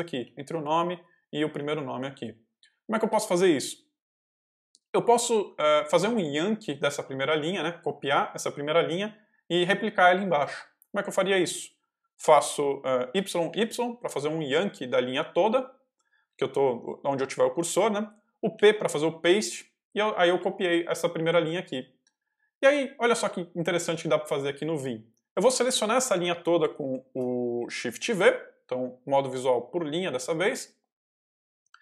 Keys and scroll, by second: 0.0-2.6 typing, 13.0 y, 18.5 p, 20.0-21.7 typing, 27.9 shift+v.